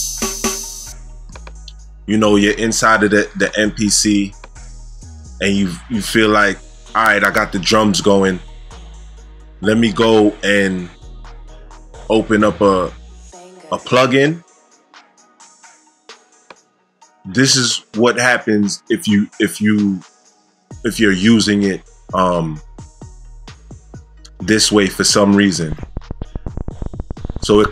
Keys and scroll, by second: 0.5 space, 25.6 space.